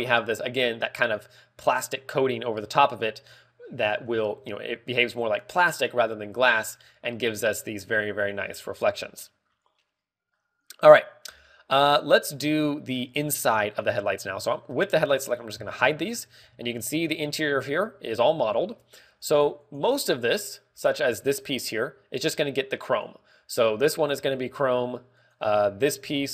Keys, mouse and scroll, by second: 7.4 scroll up 2, 7.9 middle click, 7.9-8.5 scroll up 4, 8.5 ctrl+w, 9.9 scroll down 1, 10.5 middle click, 10.5 scroll down 2, 11.8 scroll down 5, 12.4 scroll up 3, 13.1 shift+middle click, 14.2 scroll up 2, 14.6 shift+middle click, 16.2 h, 16.6-16.9 scroll up 2, 17.3-17.8 scroll up 3, 17.4 shift+middle click, 18.3 shift+middle click, 18.9 scroll up 1, 19.5 shift+middle click, 20.7 right click, 21.2 z, 21.7 z, 22.8 click, 23.7 click, 26.0 right click.